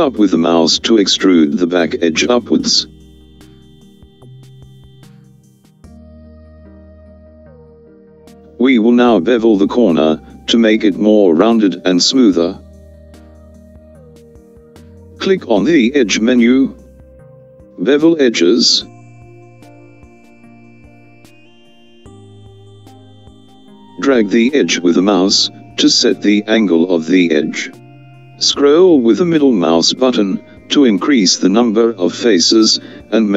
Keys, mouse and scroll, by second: 18.4 click.